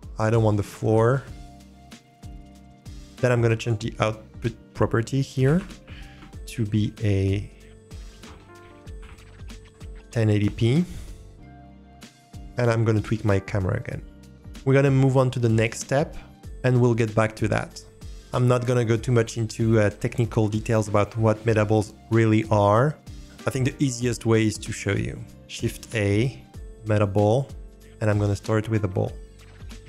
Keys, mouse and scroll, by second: 0.2-1.8 drag, 2.9 click, 3.6-13.6 drag, 12.8 middle click, 13.9-14.4 ctrl+drag, 13.9 ctrl+middle click, 25.6 shift+a, 29.5 drag.